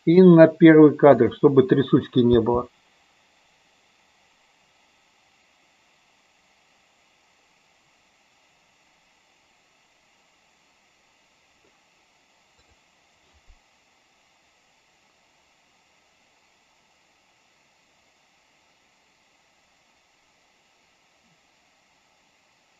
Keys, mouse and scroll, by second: 1.1 click, 2.3 space.